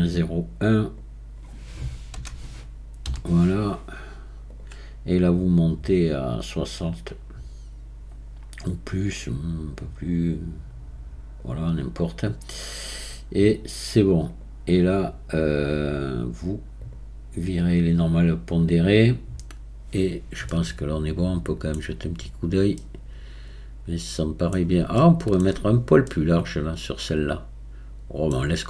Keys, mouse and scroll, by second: 5.3-8.5 drag, 14.3-15.7 drag, 15.7-16.8 scroll down 1, 16.8-17.8 drag, 17.8-18.5 scroll down 1, 18.5-20.5 scroll down 1, 20.5-22.1 middle drag, 22.1-22.8 scroll up 4, 22.8-25.7 middle drag, 25.7-26.1 scroll up 4, 26.1-28.4 middle drag, 28.4-28.6 scroll down 7.